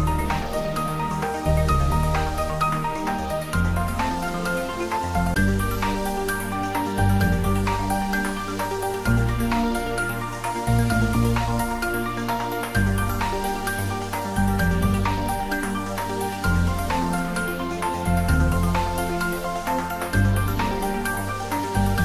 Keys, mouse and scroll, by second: 8.7 click, 17.5 click, 18.2 Tab, 20.7 3, 20.9 click.